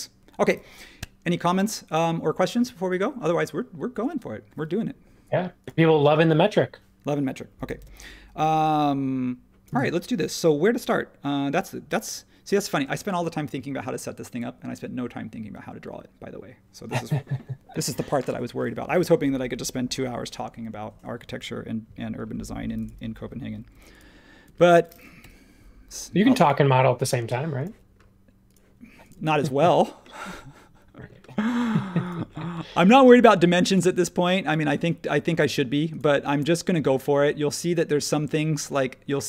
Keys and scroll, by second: 7.8 super+s, 24.4 ⟲, 25.2 l, 27.6 ⟲, 29.1 ⟲, 36.0 ↺.